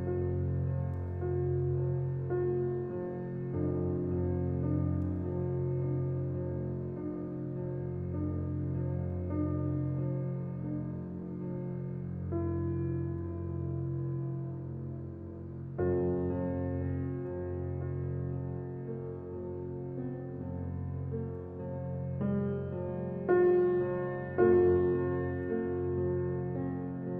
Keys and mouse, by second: 0.1-7.8 typing, 10.5-12.9 typing, 18.4-19.9 drag, 20.4 click, 21.6 click, 22.3 click, 24.6 click.